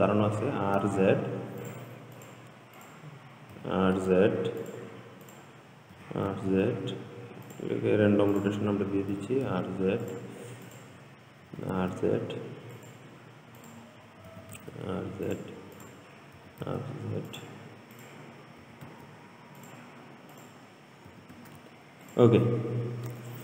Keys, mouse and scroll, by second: 0.1 r, 2.4 click, 3.0 click, 3.8 r, 5.5 click, 6.2 r, 8.6 click, 9.4 r, 10.9 click, 11.7 r, 13.8 click, 14.5 r, 16.0 click, 16.6 r, 18.2 click, 18.9 r, 20.6 click, 21.3 r.